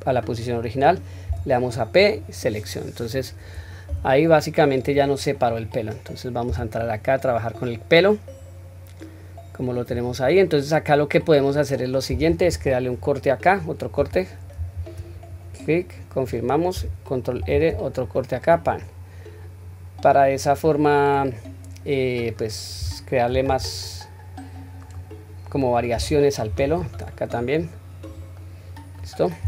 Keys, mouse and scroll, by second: 3.9 Tab, 4.8 click, 5.5 click, 6.5 Tab, 7.6-9.8 middle drag, 10.0-10.6 scroll down 2, 10.4-11.1 middle drag, 11.5-13.0 scroll up 1, 13.2 scroll up 1, 14.5 ctrl+r, 18.8-20.6 middle drag, 20.9-21.3 scroll down 1, 21.3-22.1 middle drag, 23.3 ctrl+r, 28.3-29.0 middle drag, 29.3 scroll up 1.